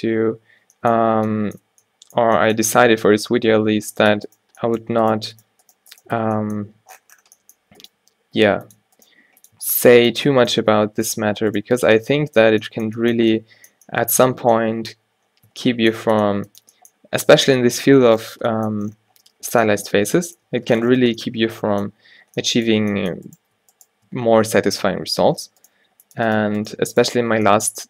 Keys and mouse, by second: 0.0 a, 0.4 ctrl+n, 1.1 Tab, 1.8 Tab, 3.6 ctrl+r, 6.2 f, 8.0 g, 9.2 g, 9.7 Tab, 10.7 Tab, 11.1 click, 11.8 f, 12.5 a, 15.6 Tab, 20.6 Tab, 23.3 click, 24.0 click, 25.3 alt+w, 25.8 g, 27.4 g.